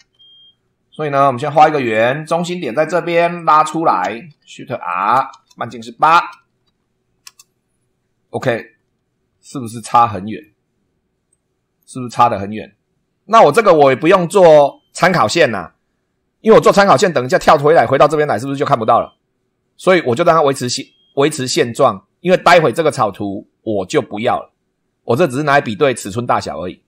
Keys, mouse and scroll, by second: 0.0 super+2, 1.5 click, 2.8 click, 3.4 click, 4.0 Escape, 4.9 click, 5.3 shift+r, 6.7 8, 7.3 Return, 8.3-9.9 scroll down 2, 9.9 click, 11.3 click, 17.3 click, 18.0 right click, 23.0 click.